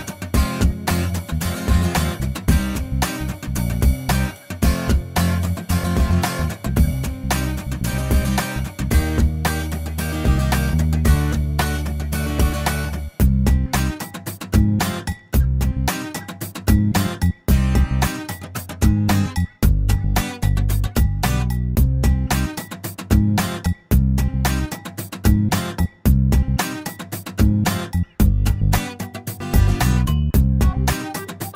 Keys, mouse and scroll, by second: 1.2 click, 2.7 shift+o, 4.9 middle click, 5.7-6.1 scroll up 1, 7.8 click, 8.4 click, 9.1 a, 10.7 3, 11.1 0, 11.3 Return, 14.7 click, 16.1 click, 17.0 a, 18.8-19.8 typing, 20.9-22.0 scroll up 4, 21.4 middle click, 23.0-24.8 drag, 26.3-28.2 drag, 28.3-29.0 scroll down 2, 29.3-31.5 middle drag.